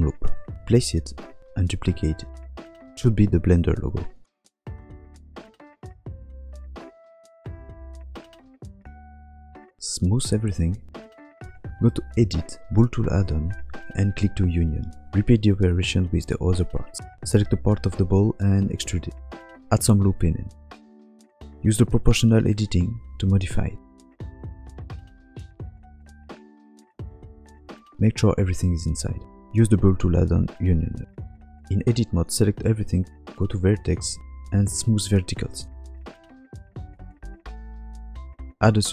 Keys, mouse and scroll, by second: 0.0-3.1 typing, 0.5 click, 0.5 shift+middle click, 5.0 click, 5.0 shift+d, 5.3 r, 5.3 s, 6.4 r, 7.0 g, 7.5 click, 7.5 scroll down 3, 7.6 s, 8.3 click, 8.7 scroll down 1, 8.8 scroll up 3, 8.9 click, 9.0 s, 9.3 click, 9.6-10.0 scroll down 2, 9.9 middle click, 10.0 shift+middle click, 10.0 click, 10.1 click, 10.3 right click, 10.7 click, 11.6 click, 12.3 shift+click, 12.5 shift+click, 12.9 click, 15.3 click, 15.7 click, 16.1 shift+click, 16.4 click, 17.1 middle click, 17.4 click, 18.5 middle click, 18.5 ctrl+click, 19.0 e, 20.5 ctrl+r, 21.5 alt+shift+click, 21.6 alt+shift+click, 21.9 s, 22.8 click, 23.0 s, 24.2 middle click, 24.7 click, 24.9 ctrl+click, 25.1 click, 25.3 middle click, 25.5 s, 27.8 Tab, 27.8 click, 27.9 shift+middle click, 27.9 scroll up 5, 28.0 middle click, 28.5 g, 29.3 Tab, 29.5 click, 29.8 click, 30.0 shift+click, 30.8 click, 31.1 scroll down 5, 31.2 middle click, 31.6 middle click, 31.9 a, 33.3 click, 35.0 middle click, 36.1 KP_7, 36.6 scroll down 1, 36.8 shift+middle click, 37.0 shift+middle click, 38.1 click, 38.6 click, 38.6 shift+a.